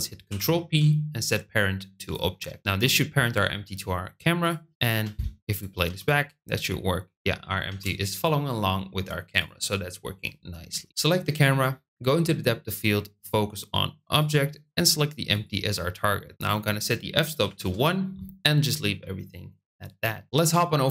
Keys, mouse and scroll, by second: 0.2 ctrl+p, 4.3 click, 4.9 space, 5.8 space, 7.6 space, 9.3 click, 14.1 click, 16.4-18.4 drag.